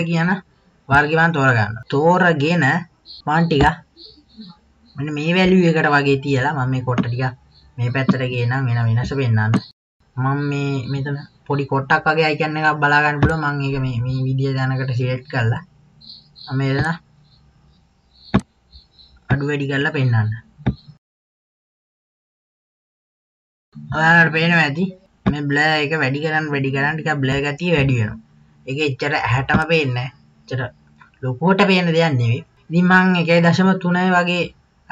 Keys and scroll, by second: 1.9 KP_2.